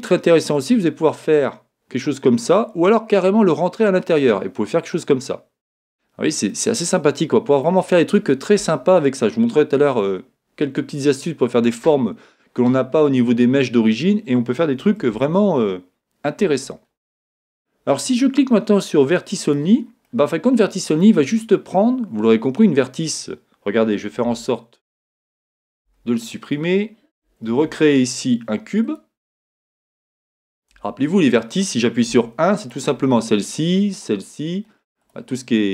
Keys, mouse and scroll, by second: 6.5-19.5 middle drag, 19.5 click, 20.1-24.2 middle drag, 24.2 Tab, 27.5 shift+a, 28.8-32.6 middle drag, 30.7 Tab, 32.1 1, 32.6 click, 33.9 click, 35.0 click.